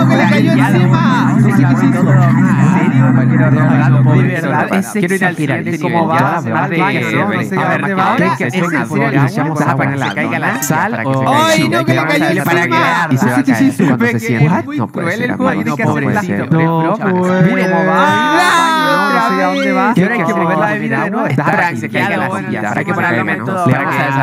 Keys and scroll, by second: 4.2 space.